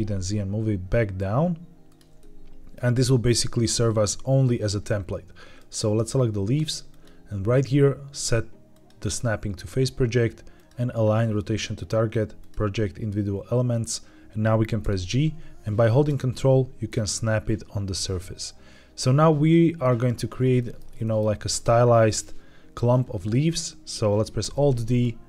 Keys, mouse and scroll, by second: 1.8 click, 2.1 middle click, 2.9-4.5 scroll up 1, 4.5 Tab, 5.5 click, 6.8-13.5 drag, 14.7 g, 19.9-20.3 ctrl+drag, 20.5 middle click, 20.9 shift+middle drag, 21.4-23.0 scroll up 1, 24.3 alt+d.